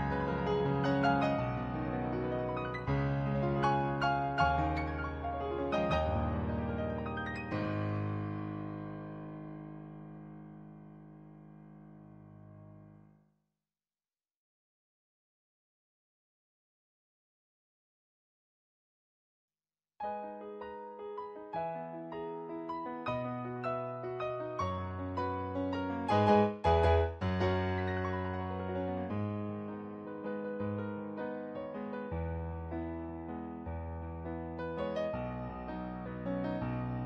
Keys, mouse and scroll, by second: 3.0 ctrl+z, 3.9 ctrl+z, 4.5 ctrl+z, 5.4 ctrl+z, 6.5 ctrl+z, 6.8 ctrl+z, 9.5 ctrl+z, 10.3 ctrl+z, 10.7 ctrl+z, 13.1 ctrl+z, 14.0 ctrl+z, 14.5 ctrl+z, 17.5 ctrl+z, 18.3 ctrl+z, 18.7 ctrl+z, 21.6 ctrl+z, 22.0 ctrl+z, 22.4 ctrl+z, 22.8 ctrl+z, 25.8 ctrl+z, 26.4 ctrl+z, 27.6 ctrl+z, 28.2 ctrl+z, 29.7 ctrl+z, 30.3 ctrl+z, 31.7 ctrl+z, 32.3 ctrl+z, 33.2 ctrl+z.